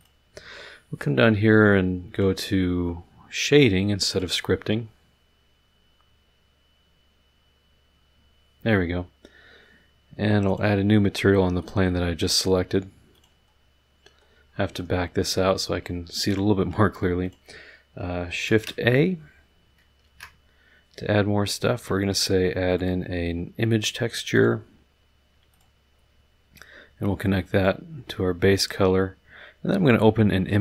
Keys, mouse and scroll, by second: 0.0 click, 2.1 click, 4.1 click, 10.5 click, 11.6 click, 13.1 click, 13.5-14.4 scroll down 2, 14.4 middle click, 14.8 middle click, 15.3 middle click, 16.3 click, 17.2 click, 18.4 ctrl+a, 20.0 shift+a, 22.7 click, 24.3 click, 25.5 click, 26.5-27.8 drag.